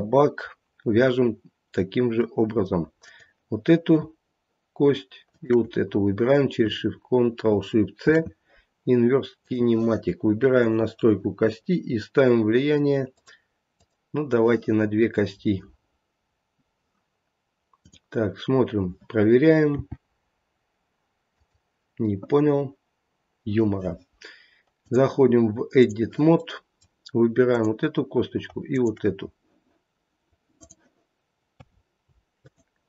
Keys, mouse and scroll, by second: 1.2-1.6 scroll up 2, 2.2 middle click, 3.0 click, 5.3 shift+click, 10.6 click, 13.0 click, 15.2 scroll down 1, 17.7 click, 19.7 g, 24.8 click, 26.3 middle click, 27.5 click, 28.6 click.